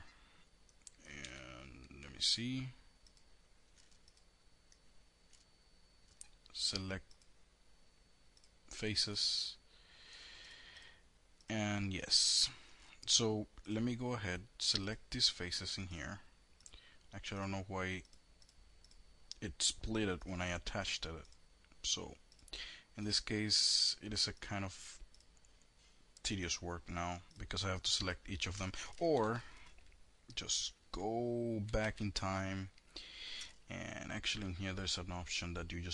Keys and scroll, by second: 0.8 2, 28.7 ctrl+z, 32.1 ctrl+z.